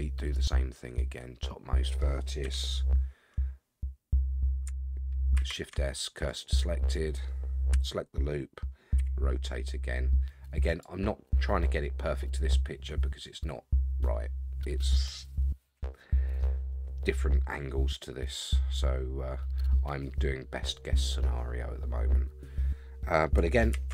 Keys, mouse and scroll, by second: 0.3 click, 1.0-2.0 middle drag, 2.4 KP_3, 3.6-4.0 scroll down 3, 5.3 shift+s, 7.7 l, 9.0 r, 11.8 scroll down 2, 16.6-17.2 scroll down 5, 18.4-19.2 scroll up 6, 23.7 shift+d.